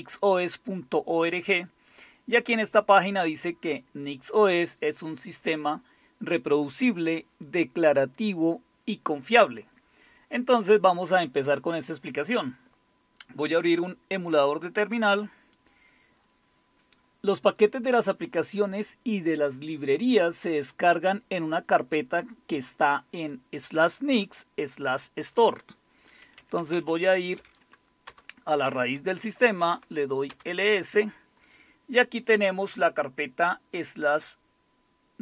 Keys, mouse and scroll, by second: 1.4-2.0 scroll down 2, 2.0-3.2 scroll down 1, 14.5 click, 15.3 click, 26.3-28.1 typing, 29.2-30.3 typing, 30.3 Return, 34.1-35.2 drag.